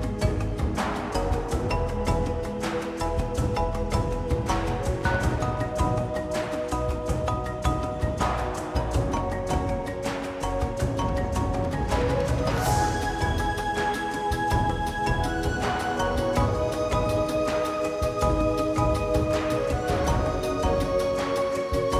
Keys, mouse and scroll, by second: 0.7 KP_Divide, 0.9 scroll down 2, 1.0 middle drag, 1.1 scroll up 2, 1.3 g, 3.0 r, 4.5 middle click, 4.7 scroll up 3, 4.9 click, 5.1 shift+middle click, 5.2 Tab, 5.5 Tab, 5.9 KP_Decimal, 6.0-9.0 shift+middle drag, 7.4 click, 9.0-10.9 drag, 10.9 shift+middle click, 11.7 Tab, 12.0-12.4 scroll down 2, 12.3 click, 12.6 3, 12.8 middle click, 13.2 KP_Divide, 13.4 middle click, 13.6 KP_1, 13.9-15.8 shift+middle drag, 15.8 Tab, 16.7 click, 17.4 click, 18.0-19.7 middle drag, 19.7 click, 20.6 middle click, 20.9 click.